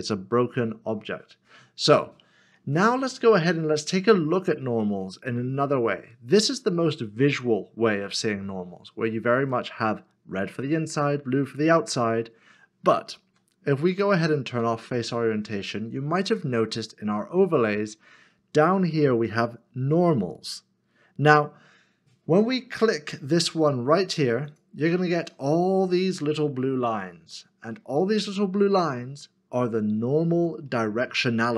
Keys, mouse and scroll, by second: 3.4 middle click, 13.3 q, 25.6 q, 25.6 middle click.